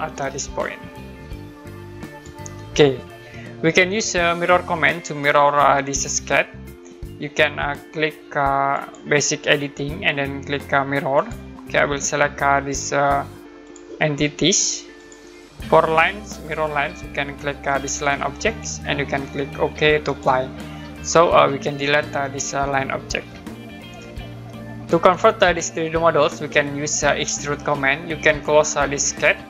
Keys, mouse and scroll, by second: 0.0 middle click, 0.6 click, 2.6 scroll down 1, 3.3 middle click, 8.7 click, 11.1 click, 12.7 click, 14.8 click, 16.3 click, 18.5 click, 20.1 click, 21.6 click, 23.1 Delete, 24.4 middle click.